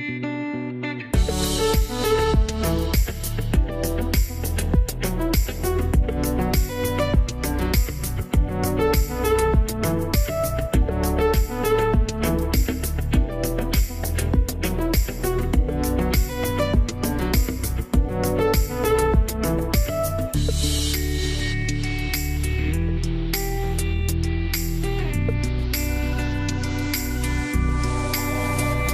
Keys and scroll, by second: 5.4 1, 5.6 Return, 8.3 0, 8.8 ,, 9.3 5, 9.5 Return, 15.8 1, 16.0 Return, 17.6 0, 18.1 /, 19.5 6, 19.7 Return, 24.4 BackSpace, 24.8 7, 25.0 Return, 26.6 BackSpace, 27.1 5, 27.3 Return.